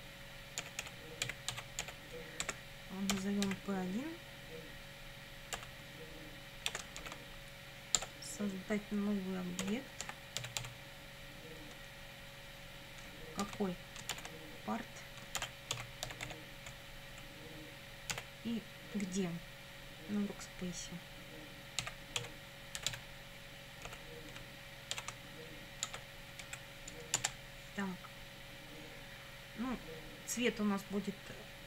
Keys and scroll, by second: 0.4-3.5 typing, 5.6 =, 6.7 space, 7.0 shift+i, 8.0 Tab, 9.4-11.1 typing, 13.4 shift+9, 14.1 shift+', 15.1-16.8 typing, 17.1 Right, 18.1 ,, 21.9-23.9 typing, 25.0 shift+w, 25.9 Tab, 26.5 Right, 27.2 Return.